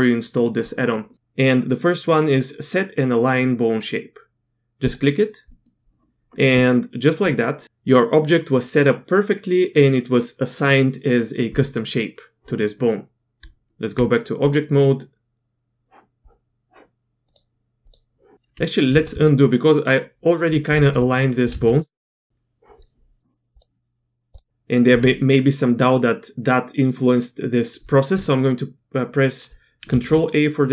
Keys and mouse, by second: 5.5 click, 6.6 click, 13.4 Tab, 17.3-18.2 drag, 18.9 ctrl+z, 19.1 ctrl+z, 20.7 ctrl+z, 21.5 ctrl+z, 22.0 ctrl+z, 22.3 Tab, 23.5-24.5 drag, 29.9 ctrl+a.